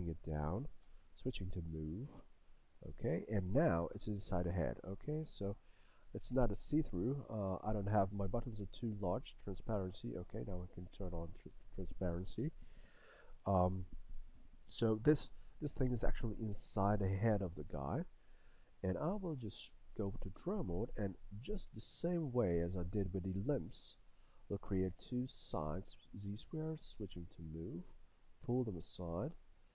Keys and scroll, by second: 0.9 w, 27.0 w.